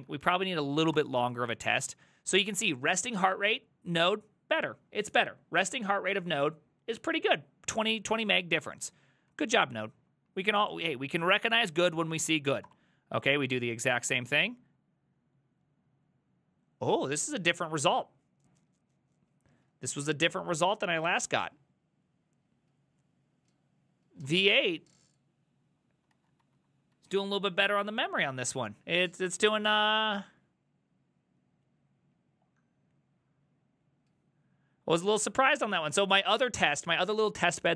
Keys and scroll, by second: 0.0 ctrl+v, 1.0 Return, 8.2 ctrl+a, 8.4 2, 9.3 Up, 12.7 Return, 13.2 ctrl+a, 13.6 4, 15.7 ctrl+a, 26.2 ctrl+a, 26.5 ctrl+a, 27.0 alt++.